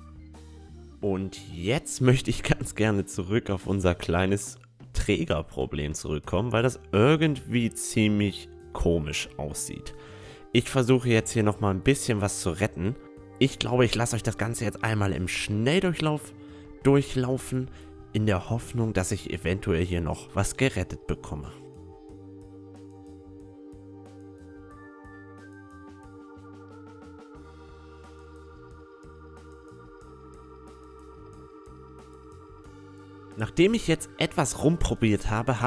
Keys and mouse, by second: 0.4-10.4 middle drag, 8.3 Tab, 9.0 Tab, 9.3-10.4 drag, 9.3-10.4 right drag, 9.5 Tab, 12.7 right click, 12.9 middle click, 13.1-14.9 drag, 13.7-16.7 right drag, 15.9-17.6 drag, 17.6 s, 21.9 Tab, 22.1 a, 22.2 Tab, 22.3 a, 22.3 ctrl+r, 22.4 click, 22.6 right click, 22.8 click, 23.2 right click, 23.4 click, 23.6 Tab, 23.7 middle click, 24.2 Tab, 24.2 middle click, 24.3 a, 24.3 click, 24.3 right click, 24.4 click, 24.8 middle click, 25.0 right click, 25.1 click, 25.6 middle click, 25.7 right click, 26.1 s, 26.9 middle click, 27.0 s, 27.1 s, 27.5 Tab, 27.6 middle click, 27.9 Tab, 28.0 click, 28.1 middle click, 28.1 a, 28.3 click, 28.3 right click, 28.4 a, 28.5 middle click, 28.7 click, 28.8 Tab, 28.9-31.6 middle drag, 31.4 Tab, 31.4 a, 31.5 right click, 31.5 a, 31.6 click, 31.7 a, 32.4 middle click, 32.7 right click, 32.9 a, 33.0-35.6 drag, 33.0 right click, 33.0 a, 33.7 a, 34.0 a, 34.6-35.6 right drag.